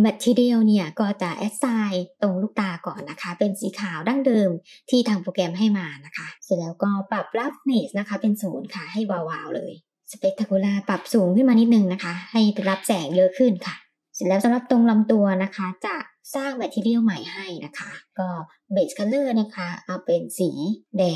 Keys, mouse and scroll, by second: 0.2 click, 1.4 click, 2.8 click, 4.7 click, 6.3-7.1 scroll down 4, 7.1-10.4 drag, 11.5 click, 12.3-13.9 scroll up 3, 14.7 click, 15.9 click, 17.5 click, 18.1 click.